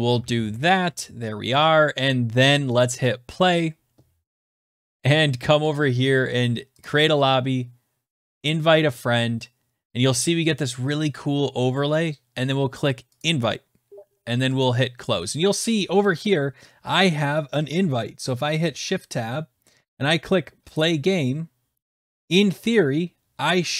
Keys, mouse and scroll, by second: 0.0-0.8 typing.